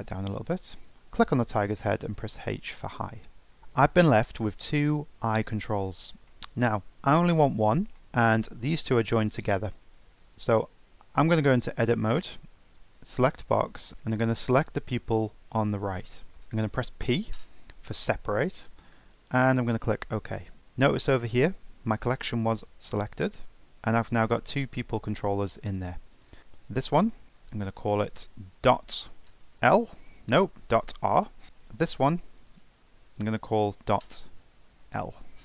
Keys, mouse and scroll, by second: 0.0-0.9 drag, 2.2 h, 4.7-5.4 scroll up 4, 6.0 click, 6.2 scroll down 3, 6.3 middle drag, 6.6-7.4 scroll up 5, 7.4-7.8 middle drag, 7.8 scroll down 1, 7.9-8.5 middle drag, 8.5 Tab, 10.3 click, 10.9 Tab, 11.7 Tab, 12.7 click, 13.9 click, 16.9 p, 26.1 click, 26.4 Tab, 27.0 click, 27.2-30.3 drag, 31.6 click, 32.4 click, 32.6-35.4 drag.